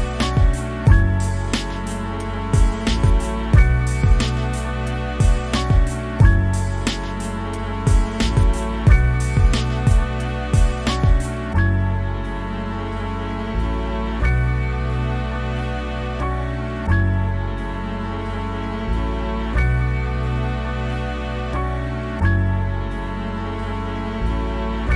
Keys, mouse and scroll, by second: 0.3-0.8 scroll down 2, 0.4 shift+middle click, 0.5 click, 0.8 click, 1.2 middle click, 1.4 click, 1.8 middle click, 2.0 click, 2.3 shift+middle click, 2.4 scroll up 1, 2.8 scroll down 2, 2.9 click, 3.1 middle click, 3.6 scroll up 1, 3.7 click, 4.2 middle click, 4.3 click, 4.9 middle click, 5.0 click, 5.5 scroll down 1, 5.6 middle click, 5.7 click, 6.4 middle click, 6.5 scroll up 2, 6.6 click, 6.9 scroll down 1, 7.0-8.2 shift+middle drag, 8.2-8.7 scroll up 3, 8.4 click, 8.6 shift+middle click, 8.8 click, 9.5 middle click, 9.7 click, 9.9 scroll down 1, 10.1 click, 10.7 shift+middle click, 10.8 click, 11.2 scroll down 1, 11.3 click, 12.3 scroll up 2, 12.4 click, 13.3 middle click, 13.5 scroll up 1, 13.6 click, 14.6 scroll down 2, 14.7 middle click, 14.9 click, 15.1 shift+middle click, 15.2 scroll up 1, 15.3 click, 15.8 scroll down 1, 15.9 middle click, 16.1-16.6 scroll up 2, 16.2 shift+middle click, 16.6 click, 16.8 shift+middle click, 17.0 click, 17.6 shift+middle click, 17.8 click, 18.3 shift+middle click, 18.4 click, 19.2 shift+middle click, 19.3 click, 19.9 shift+middle click, 20.2 click, 20.5 scroll up 1, 20.7 click, 21.1 shift+middle click, 21.2 scroll up 2, 21.3 middle click, 21.5 click, 21.8 scroll down 1, 21.9 click, 22.2 shift+middle click, 22.4 click, 22.8 scroll down 1, 22.9 click, 23.6-24.2 scroll down 2, 23.7 click, 24.2 middle click, 24.3 click.